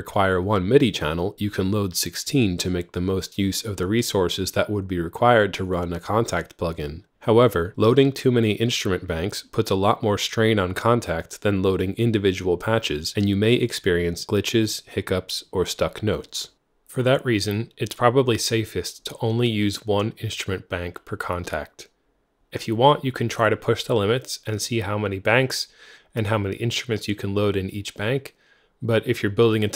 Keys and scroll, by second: 18.5 F3, 23.1 super+d.